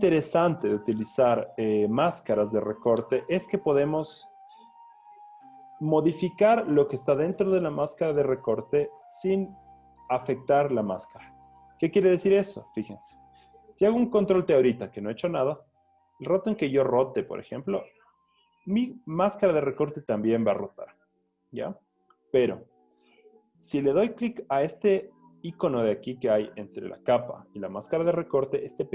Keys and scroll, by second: 14.5 super+t, 17.9 Return, 22.3 super+z.